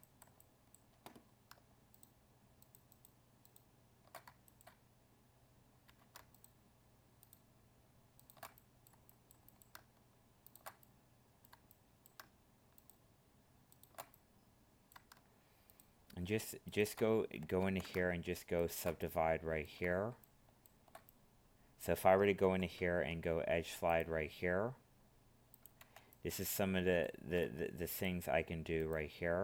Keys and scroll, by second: 17.6 ctrl+z, 22.4 ctrl+e.